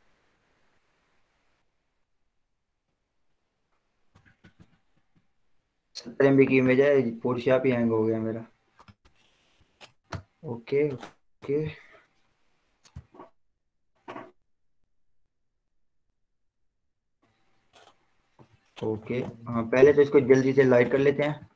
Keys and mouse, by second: 0.9 click, 1.5 ctrl+0, 10.4 ctrl+0, 11.8 Return, 19.9 ctrl+0, 19.9 ctrl+j, 20.8 alt+shift+s.